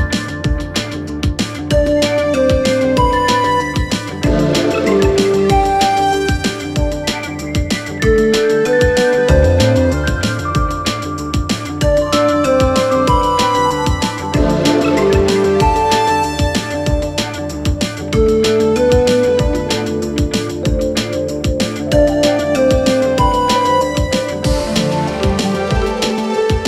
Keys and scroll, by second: 15.6 s.